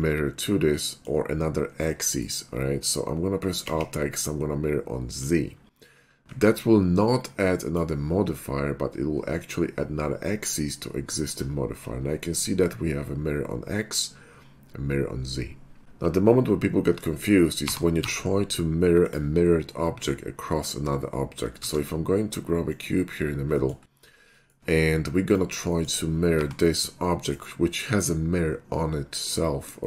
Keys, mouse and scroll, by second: 1.0 middle click, 1.3 middle click, 2.0 middle click, 3.7 alt+x, 5.1 click, 6.3 ctrl+`, 7.0-7.7 drag, 16.1 2, 17.0 shift+3, 17.1 middle click, 17.6 g, 18.0 x, 19.1 click, 21.7 shift+a, 22.7 click, 23.9 middle click, 24.4 shift+middle click, 25.2 click, 25.8 shift+middle click, 26.3 g, 27.3 right click, 29.4 scroll down 1, 29.8 middle click.